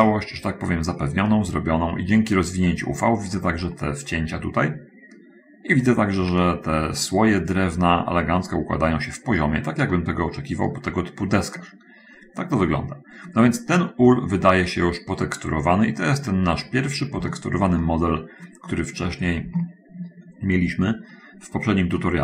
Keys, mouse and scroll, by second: 0.2-3.0 middle drag, 6.1-6.8 scroll up 1, 10.4 middle click, 10.7-13.0 middle drag, 14.9-16.2 middle drag, 16.9-17.4 scroll up 1, 17.7-20.4 shift+middle drag.